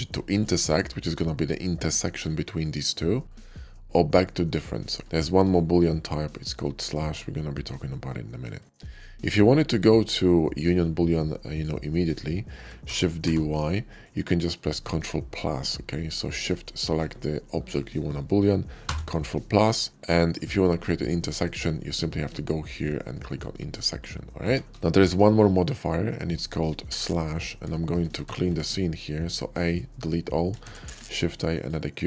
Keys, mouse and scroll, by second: 0.1 click, 0.6-1.0 middle drag, 2.5-3.0 middle drag, 3.9 click, 4.8 middle click, 6.4-6.8 shift+middle drag, 7.0-8.2 shift+middle drag, 8.6 shift+middle click, 9.1-9.6 shift+middle drag, 10.2 shift+middle drag, 11.2 shift+click, 12.7 shift+d, 13.1 y, 13.3 shift+d, 13.9 click, 16.1 shift+click, 18.6 ctrl+KP_Add, 19.9 ctrl+KP_6, 20.5-21.2 middle drag, 23.0 click, 24.3 ctrl+z, 25.1-26.5 middle drag, 26.9 shift+middle click, 27.7 shift+middle click, 28.1 a, 28.3 x, 28.5 a, 29.5 click, 30.5 shift+a, 31.3 click.